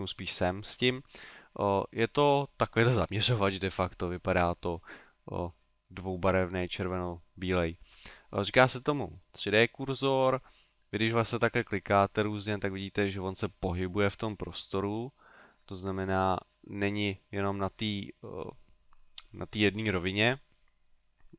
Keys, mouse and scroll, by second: 7.9 click, 8.3 click, 10.6 middle click, 11.8 click, 12.2 click, 15.7 click, 16.2 middle click, 17.4 middle click, 20.5 middle click.